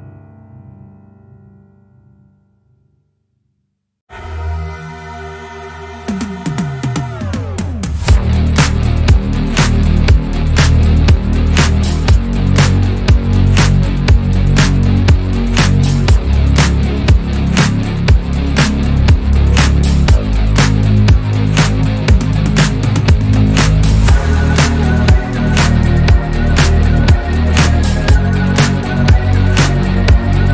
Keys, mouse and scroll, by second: 3.1 Tab, 4.1 a, 4.9 s, 6.4 s, 9.5 s, 13.8 scroll down 2, 14.0-16.0 middle drag, 16.2 scroll up 5, 16.9 /, 17.7 Tab, 18.0 click, 18.3 click, 18.9 Tab, 20.7 2, 21.1 alt+click, 21.7 f, 22.0 scroll down 2, 22.2-23.3 middle drag, 23.3 alt+click, 24.0 f, 24.5 Tab, 25.6 /, 26.1 scroll down 3, 26.4 click, 26.7-28.8 middle drag, 29.5 KP_3.